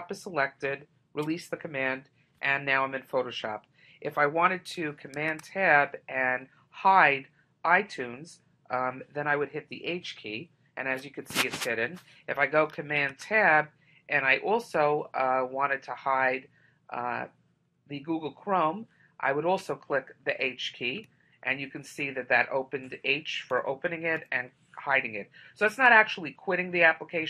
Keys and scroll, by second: 5.3 super+Tab, 13.1 super+Tab.